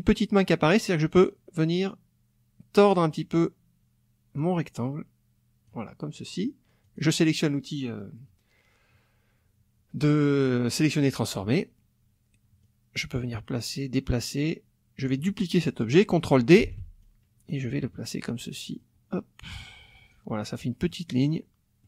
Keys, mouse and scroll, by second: 1.2-3.1 drag, 4.4-5.8 drag, 6.8 click, 12.6-15.2 drag, 16.6 ctrl+d, 17.0-20.3 ctrl+drag, 20.8 middle click, 21.4 middle click.